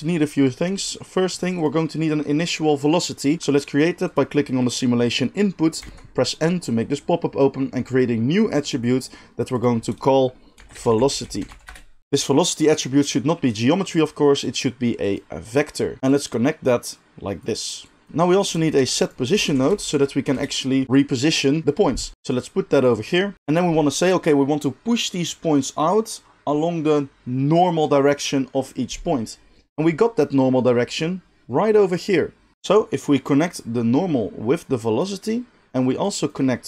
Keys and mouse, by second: 1.6-8.6 middle drag, 5.8 n, 8.6-9.4 drag, 9.4 middle click, 9.5-22.1 drag, 18.1 shift+a, 18.7 shift+a, 22.1 ctrl+z, 22.1 middle click, 22.4-23.3 drag, 23.3-33.5 middle drag, 23.3 g, 33.5-36.6 drag.